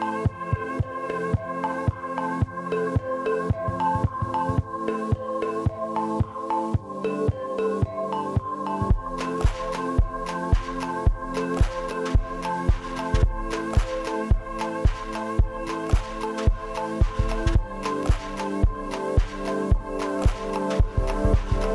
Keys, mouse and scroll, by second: 7.7 middle click, 8.2 y, 8.4 shift+middle click, 11.5 scroll down 7, 11.6 middle click, 12.1 middle click, 13.1-13.8 scroll down 9, 13.8 scroll up 11, 14.7 scroll up 4, 14.9 middle click, 14.9-16.0 scroll down 1, 16.0 middle click, 16.1 scroll down 1, 16.2 middle click, 16.4-16.9 scroll up 11, 16.9 middle click, 17.0 scroll down 7, 17.5 scroll up 1, 18.8 middle click, 19.0 scroll down 13, 19.2 space, 19.4 middle click, 19.9 scroll down 3, 20.5 middle click, 21.4 scroll up 6.